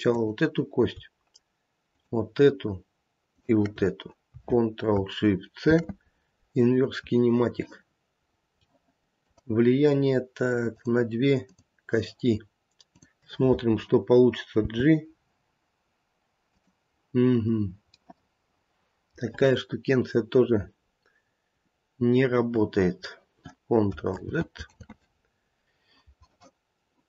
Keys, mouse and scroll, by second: 0.0 click, 0.2 shift+click, 1.8 shift+click, 3.3 shift+click, 5.6 ctrl+shift+c, 8.3 scroll down 1, 8.6 middle click, 10.8 click, 11.4 click, 14.6 g, 18.0 middle click, 19.0 middle click, 19.0 scroll down 1, 24.1 ctrl+z, 24.7 ctrl+z.